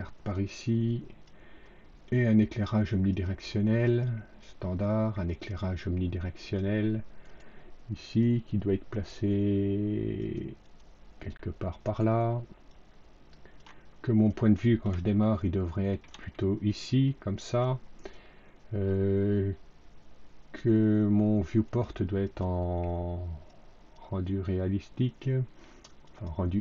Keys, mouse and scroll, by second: 0.2 click, 2.4 click, 3.0 click, 3.9 click, 5.2 click, 6.3 click, 7.2 right click, 10.1 click, 10.6 click, 11.7 right click, 12.6 click, 15.1 alt+middle click, 16.2-17.5 alt+middle drag, 21.6 click, 22.2 click, 23.4 click, 26.0 click.